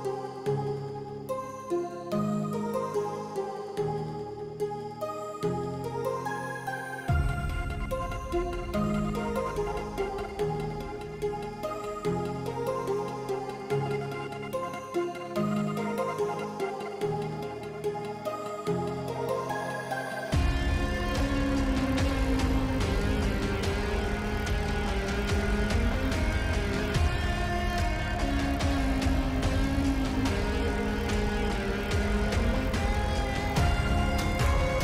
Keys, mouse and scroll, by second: 1.3 middle click, 2.0 s, 3.9 click, 4.8 s, 6.7 click, 7.7 s, 9.3 click, 10.2 s, 12.1 s, 13.2 a, 13.7 s, 16.4 s, 21.7 alt+right click, 23.1 s, 25.1 a, 25.4 s, 28.1 g, 30.7 shift+middle click, 31.1 ctrl+s, 31.7 middle click, 33.2 middle click, 33.7 middle click, 33.9 click.